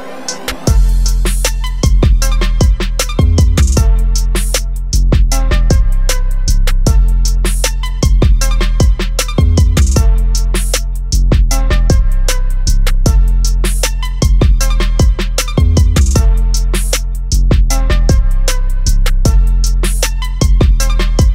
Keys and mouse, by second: 9.1 click.